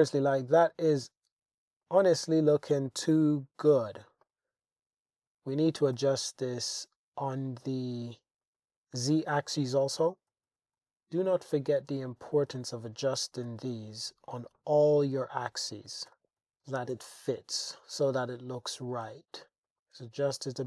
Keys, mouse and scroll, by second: 0.3 click, 1.8 click, 3.8 middle click, 4.2 click, 6.0 g, 6.3 z, 8.4 click, 9.0 click, 10.0 g, 10.3 z, 10.5 Tab, 10.8 Tab, 11.4-12.4 drag, 13.2 g, 13.5 z, 14.5 click, 15.2 click, 16.1 g, 16.6 g, 17.0 z, 17.7 click, 17.9 Tab, 19.1 Tab, 19.7 g, 19.7 z, 19.7 click, 19.9 Tab, 20.3 Tab.